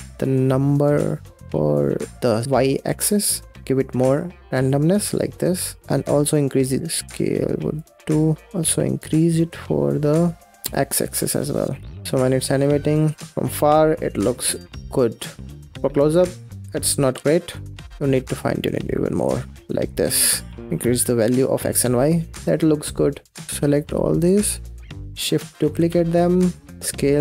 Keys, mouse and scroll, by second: 3.4 middle click, 3.8 space, 4.3 space, 4.4-4.9 scroll down 5, 5.0 middle click, 5.5 scroll up 3, 5.7 space, 5.8 ctrl+z, 6.1-8.0 shift+drag, 8.0 middle click, 8.4-9.0 scroll up 7, 9.0-10.6 shift+drag, 11.1-11.5 scroll up 3, 11.5-12.5 scroll down 8, 11.7 space, 13.0-14.2 middle drag, 14.2 click, 14.7-15.4 middle drag, 15.4 scroll down 2, 15.5-15.9 scroll up 10, 15.9-17.4 middle drag, 17.4-19.4 drag, 19.4-20.6 scroll down 1, 22.0 middle click, 22.4 scroll down 2, 22.7-23.0 scroll up 5, 23.0-23.5 middle drag, 23.5-24.0 scroll down 6, 24.8 scroll up 2, 25.1 middle click, 25.6 shift+d.